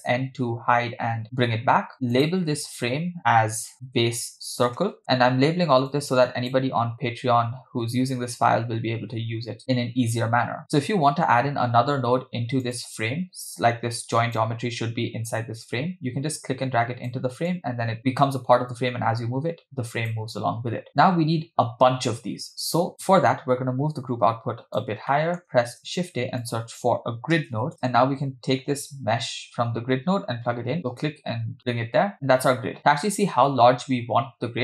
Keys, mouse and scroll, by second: 0.0 n, 0.7 n, 2.1-5.0 drag, 5.9 click, 12.7 click, 14.2 click, 16.4 click, 17.5-20.2 drag, 22.7-24.9 drag, 25.1 middle click, 25.7 shift+a, 27.7 middle click, 27.7 scroll down 2, 30.8 click, 32.1-32.8 scroll up 1, 32.8-34.6 scroll up 2.